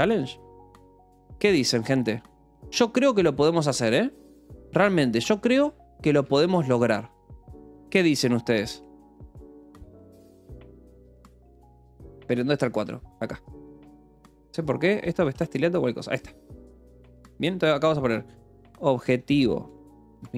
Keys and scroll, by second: 0.0-0.9 typing, 2.7-13.8 typing, 3.7 Return, 4.2 Escape, 6.0 Return, 6.2 Escape, 9.2 ctrl+s, 14.2 Return, 14.8 Escape, 15.7 ctrl+s, 15.9-20.3 typing.